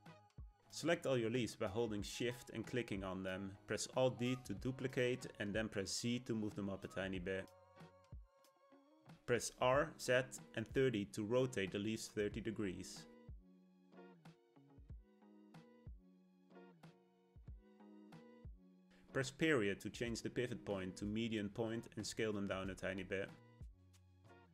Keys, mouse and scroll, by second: 1.2 shift+click, 2.0 shift+click, 4.9 alt+d, 9.5 r, 13.0 Tab, 13.3 a, 14.3 s, 15.4 Tab, 16.0 s, 19.3 ., 20.8 s, 23.6-24.5 middle drag.